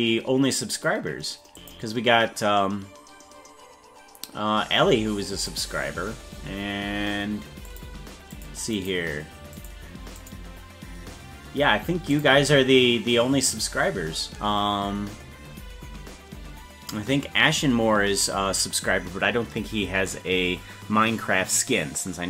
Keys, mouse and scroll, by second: 1.6 click, 5.5 click, 7.7 click, 8.3 click, 8.7 click, 9.5 click, 10.2 click, 12.1 click.